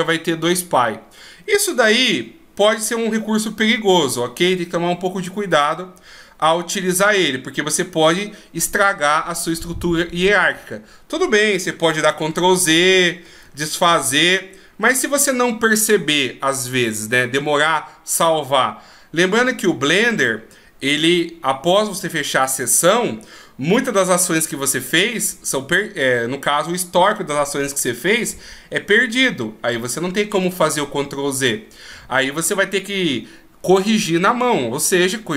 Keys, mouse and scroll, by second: 12.3 ctrl+z.